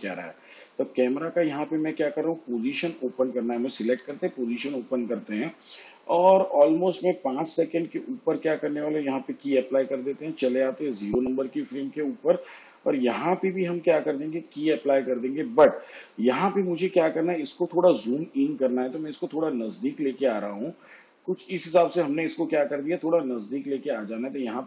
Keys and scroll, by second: 3.9 p.